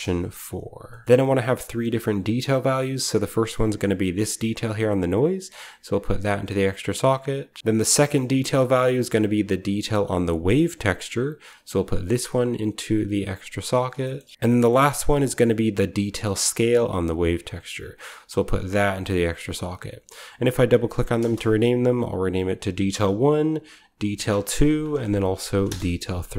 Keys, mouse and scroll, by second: 0.6-1.6 scroll down 1, 0.8-3.1 middle drag, 1.0-1.8 typing, 1.6-3.1 scroll up 1, 3.1-3.4 scroll up 1, 4.9 click, 6.3 click, 6.7 click, 7.6-8.4 typing, 7.9 scroll down 1, 8.9 middle click, 9.0-10.9 drag, 11.2-13.1 drag, 13.9 middle click, 14.2 scroll up 1, 14.2 typing, 14.3-14.8 scroll down 1, 15.0-16.0 scroll up 1, 16.0-17.0 scroll up 1, 17.2-18.7 drag, 18.9 click, 19.4-20.2 drag, 20.3 click, 20.5 click, 21.1 click, 21.1 space, 21.3 1, 21.5 click, 21.9 click, 22.0 click, 22.4 click, 22.7 typing, 23.3-23.6 drag, 23.7 click, 23.9 click, 24.0 ctrl+c, 24.5 ctrl+v, 25.4 BackSpace, 25.5 Return, 25.5 3.